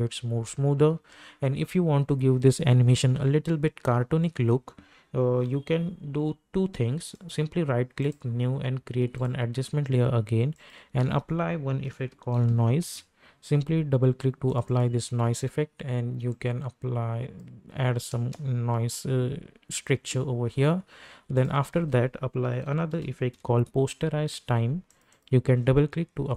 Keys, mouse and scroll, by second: 0.9 space, 7.1 right click, 8.1 click, 11.0 ctrl+a, 11.6-12.9 typing, 14.5-18.1 drag, 18.1 space, 21.3 click, 21.7 ctrl+a, 22.4-23.8 typing, 24.9 click.